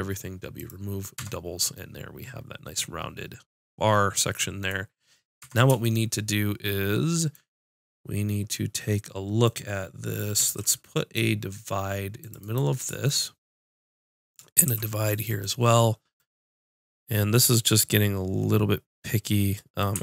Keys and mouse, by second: 1.1 Tab, 5.4 Tab, 10.4 ctrl+r, 13.2-14.6 right drag, 14.6 ctrl+r.